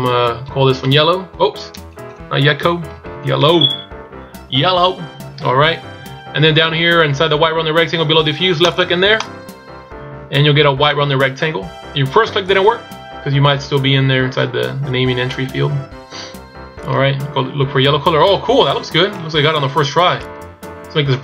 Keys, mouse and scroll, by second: 2.0 BackSpace, 3.1 l, 9.4 click, 12.7 click, 15.5 click, 20.2 click.